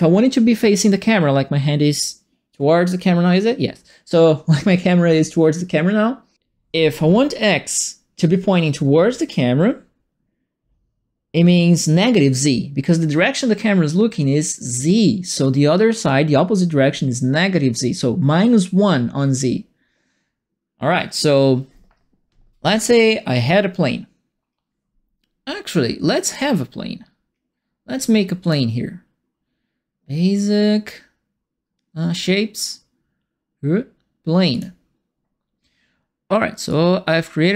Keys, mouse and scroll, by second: 26.2 click, 28.4 click, 34.5 click, 36.6-37.5 drag.